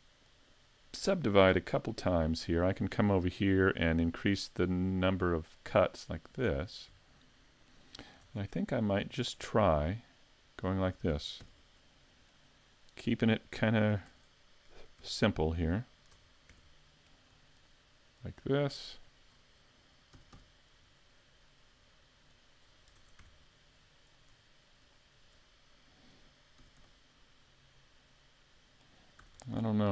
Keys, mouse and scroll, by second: 1.6 w, 4.3 click, 5.6 click, 8.2 ctrl+Tab, 9.4 right click, 9.9 shift+right click, 10.2 right click, 10.6 right click, 11.4 x, 15.0 2, 16.1 ctrl+Tab, 17.1 right click, 17.6 shift+right click, 18.2 right click, 19.0 right click, 20.1 s, 22.5 click, 23.0 ctrl+Tab, 24.1 right click, 24.8 shift+right click, 26.6 s, 28.9 click, 29.2 a, 29.4 Tab, 29.6 scroll down 3.